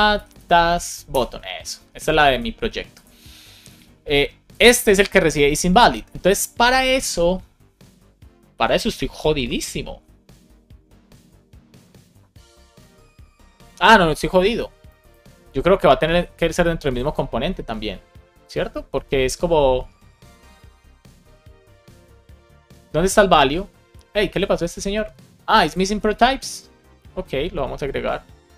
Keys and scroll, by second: 0.0-0.8 typing, 1.0 Return, 26.0 super+c.